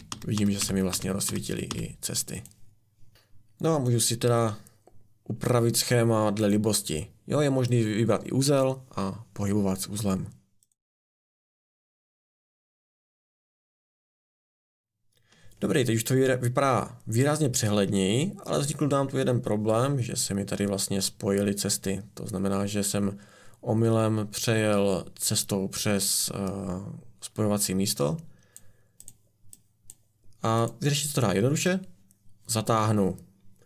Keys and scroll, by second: 0.0-1.7 typing.